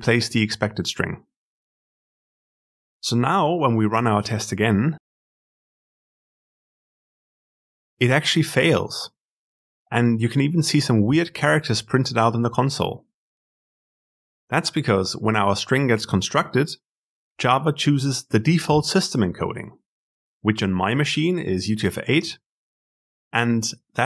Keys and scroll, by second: 3.4 ctrl+alt+F10.